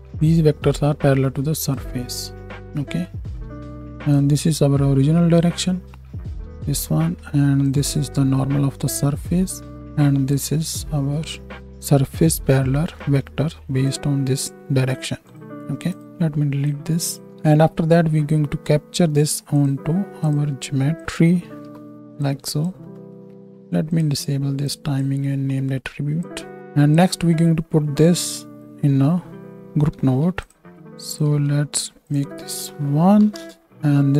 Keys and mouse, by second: 0.1 alt+a, 1.9-2.5 drag, 4.1-15.3 drag, 6.3 alt+a, 15.8 click, 16.0 ctrl+x, 16.6 click, 17.3 shift+right click, 17.4 shift+a, 17.6-20.3 drag, 20.9-22.6 drag, 23.8-28.0 drag, 27.8 middle click, 27.8 right click, 29.9 ctrl+g, 30.5 drag, 31.1 drag, 31.3 right click, 31.3 x, 32.1 click.